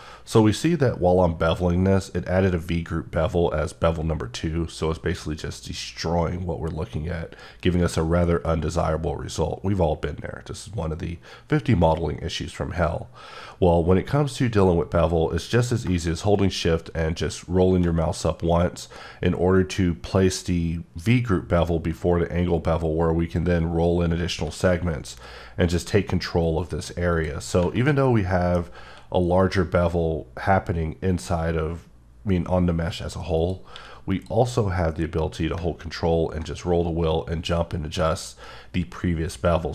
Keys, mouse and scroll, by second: 15.8 shift+click, 17.1-17.9 shift+scroll up 1, 17.9 scroll up 1, 21.9-23.0 scroll up 5, 24.3 1, 27.1 click, 27.9 middle click, 28.6 scroll, 28.6 scroll up 1, 28.9 q, 29.4 click, 33.4 click, 33.7 q, 34.1 click, 36.0-37.8 ctrl+scroll up 2.